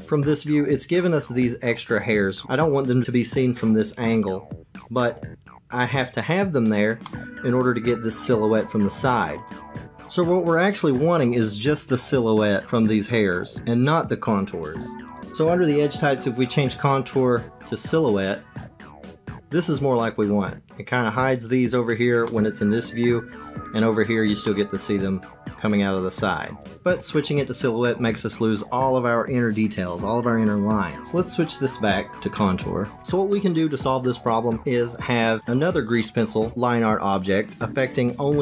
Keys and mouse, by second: 7.0-8.9 middle drag, 9.4 middle click, 16.8-18.3 drag, 22.4 click, 24.6-26.6 drag, 31.1-32.5 drag.